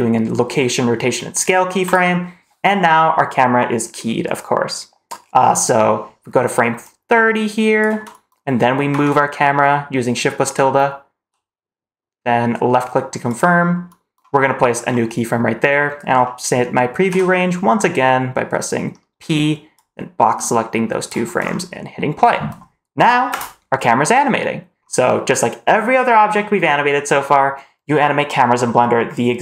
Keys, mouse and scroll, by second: 6.7-7.7 drag, 8.8 shift+`, 14.5 middle click, 14.8 scroll up 2, 17.0 p, 21.3 scroll up 2, 23.2 space.